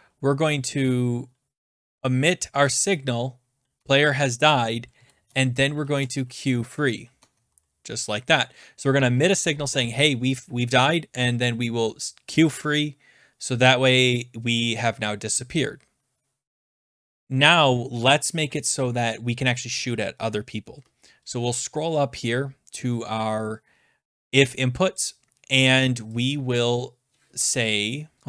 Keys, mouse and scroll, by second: 1.5-2.4 typing, 2.6 Tab, 3.8 Tab, 4.9 Right, 5.2 Return, 5.5-6.5 typing, 7.1 Tab, 7.6 Return, 21.6-22.3 scroll, 22.9-23.5 scroll, 24.4-25.0 scroll down 7, 25.0 click, 26.2 click, 26.8-27.3 scroll.